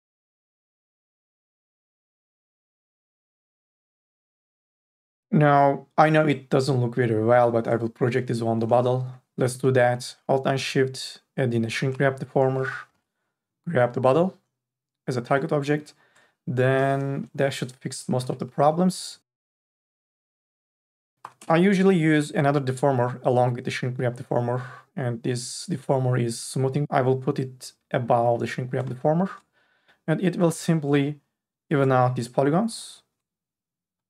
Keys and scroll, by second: 9.1 4, 12.9 n, 13.3 b, 18.2 n, 18.6 b, 21.2 4, 21.4 e.